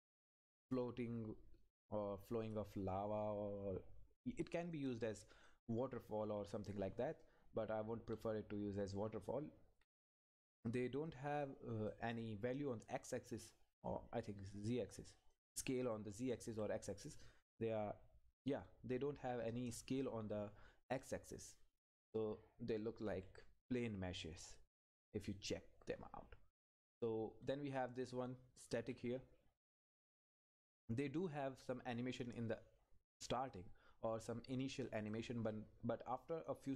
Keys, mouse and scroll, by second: 4.7 click, 6.2 Left, 10.5 click, 12.1 Left, 13.2 Left, 14.9 click, 16.6 Down, 17.5 click, 18.6 Right, 20.2 Up, 27.3 Up, 31.3 click, 33.5 click.